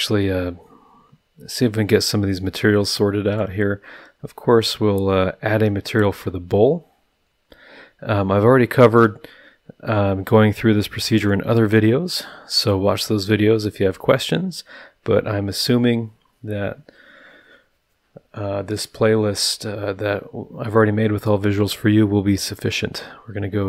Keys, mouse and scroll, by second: 1.4 click, 3.2 click, 4.5 click, 11.2 click, 22.8 KP_1.